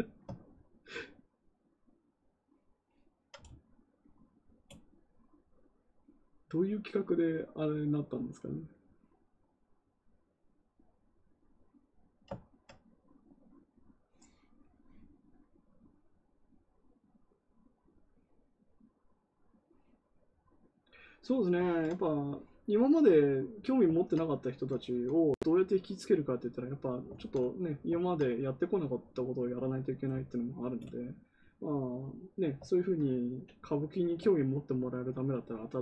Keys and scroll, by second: 27.1 ctrl+z.